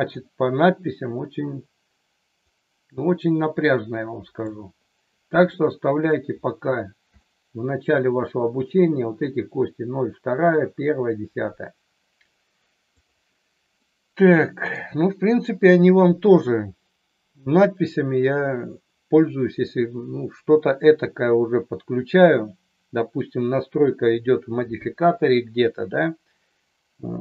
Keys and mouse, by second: 2.5-4.5 drag, 5.6 middle click, 7.2 shift+middle click, 13.0 click, 13.7 middle click.